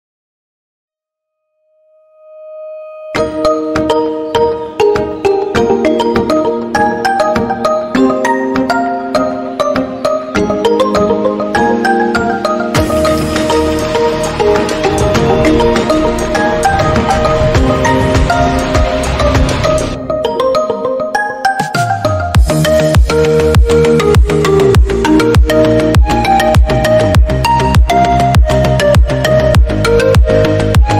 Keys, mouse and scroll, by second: 1.5 ctrl+r, 2.4 middle click, 2.6-2.9 scroll up 1, 2.9 click, 3.4 3, 3.5 scroll down 2, 3.6 middle click, 4.0 e, 5.2-5.6 scroll up 1, 5.7 ctrl+r, 6.6-8.7 middle drag, 8.7 scroll up 1, 9.0-10.2 middle drag, 11.4 ctrl+r, 12.9 alt+click, 13.6 g, 17.6 middle click, 18.2 3, 18.2 click, 18.4 scroll down 1, 18.6 middle click, 19.2 e, 20.6 middle click, 20.9 scroll up 2, 21.1 middle click, 21.7 ctrl+r, 22.5 scroll down 2, 22.7 middle click, 23.4-24.0 scroll up 3, 24.2 ctrl+z, 24.5 ctrl+z, 24.9 middle click, 25.1-25.9 scroll up 1, 25.9 alt+click, 26.4 2, 26.7 alt+click, 27.2 g, 28.5 middle click, 28.9 3, 29.1 click, 29.3-29.7 scroll down 4, 29.7 e.